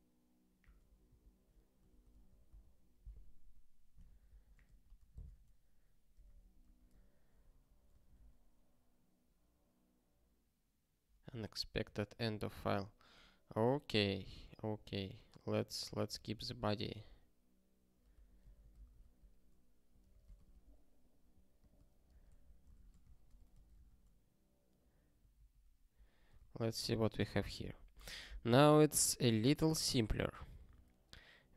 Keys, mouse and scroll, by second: 7.5 super+o, 8.2 ctrl+k, 11.8 q, 23.4 super+o, 23.8 ctrl+k, 25.4 ctrl+n, 25.7 ctrl+p, 26.4 ctrl+e.